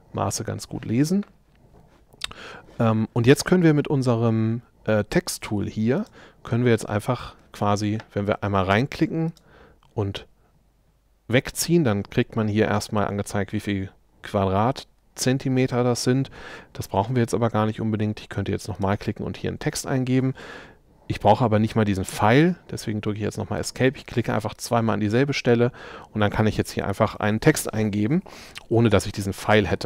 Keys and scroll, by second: 22.1 Escape.